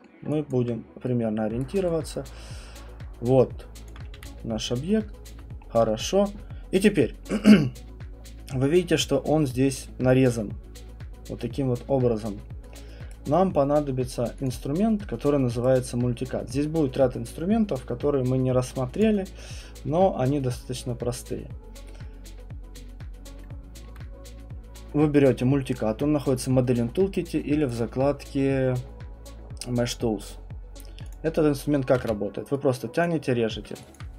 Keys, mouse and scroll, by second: 0.0 alt+middle click, 0.5 alt+right click, 1.6 right click, 3.9 alt+click, 4.2 w, 4.4-5.0 scroll, 5.3 alt+click, 5.7 scroll, 6.4 scroll, 13.1 right click, 14.4 click, 15.6 right click, 19.0 click, 23.8 alt+middle click, 27.7 click, 31.1 click, 33.0 click, 34.0 alt+click.